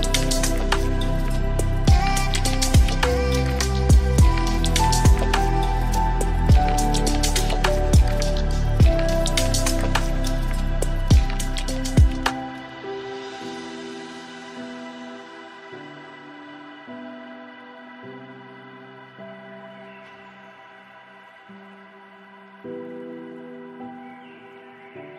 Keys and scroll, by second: 8.3 ctrl+shift+].